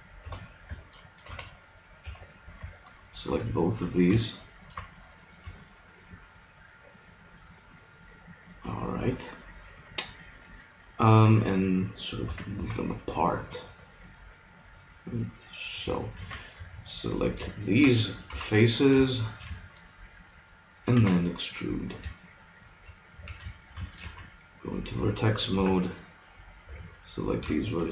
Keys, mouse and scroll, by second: 1.2 ctrl+r, 2.8-5.0 drag, 5.0-7.4 middle drag, 12.2 s, 15.8 click, 16.2 ctrl+Tab, 17.2 click, 18.2 KP_3, 19.0 middle click, 21.0 e, 23.2 a, 24.0 ctrl+Tab, 25.5 z, 26.6 b, 27.6-27.9 drag.